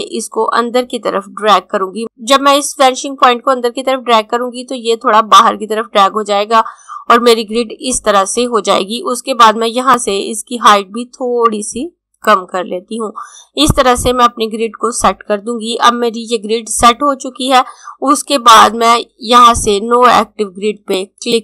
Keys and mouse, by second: 9.8 click, 20.3 click.